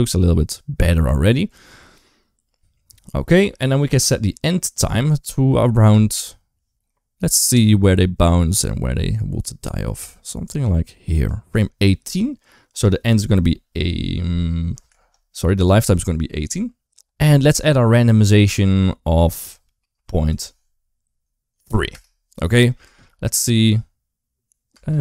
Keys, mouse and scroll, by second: 5.7 space, 7.2-11.1 drag, 12.7-14.7 drag, 15.4 click, 16.6 space, 19.2-21.7 drag, 22.7 space, 24.5 space.